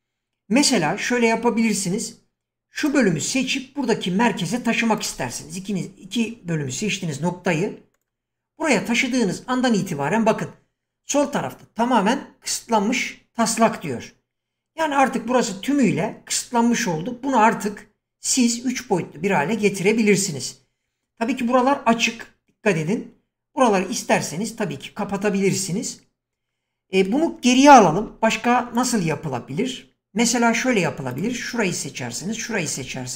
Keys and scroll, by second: 28.0 ctrl+z.